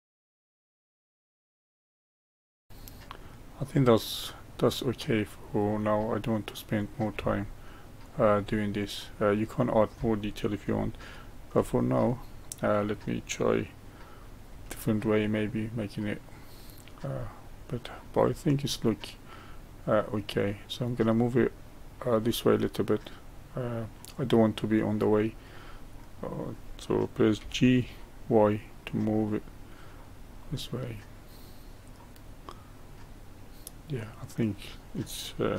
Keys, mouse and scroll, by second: 0.1 middle click, 0.3 middle click, 0.3-2.4 typing, 0.4 middle click, 0.7 middle click, 1.0 middle click, 1.2 ctrl+b, 1.2 middle drag, 1.3 click, 1.4 middle click, 1.6 shift+middle click, 2.0 ctrl+r, 2.1 middle click, 2.1 ctrl+r, 2.2 middle click, 2.3 click, 2.4 middle click, 2.5 middle click, 2.6 click, 3.4-4.1 middle drag, 6.8 click, 7.1 g, 8.5-14.5 middle drag, 14.5 Tab, 15.1-18.2 middle drag, 18.2-18.8 scroll down 1, 18.8-22.2 middle drag, 22.2-25.2 middle drag, 25.6-27.3 middle drag, 27.3 g, 30.4-33.4 middle drag.